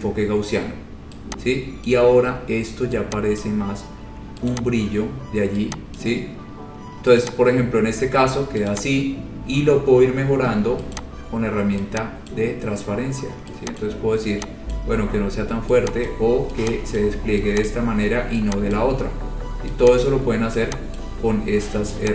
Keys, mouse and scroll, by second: 2.1 click, 3.7 click, 4.7 click, 6.3 click, 7.4 click, 9.0 click, 9.3-10.2 scroll, 11.2 click, 12.6 click, 14.0 click, 15.0 click, 16.3 click, 17.2 click, 17.9 click, 19.0 click, 20.2 click, 21.2 click.